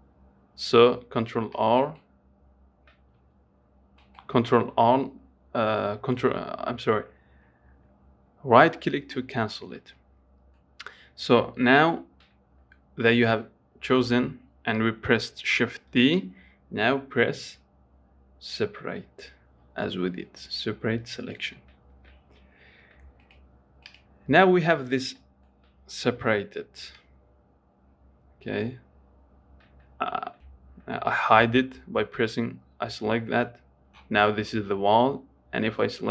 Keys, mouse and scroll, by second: 3.5 g, 10.1-13.1 middle drag, 17.7 p, 22.2 Tab, 23.5 click, 24.1 click, 25.5 middle click, 26.4 g, 30.4 ctrl+z, 33.6 click.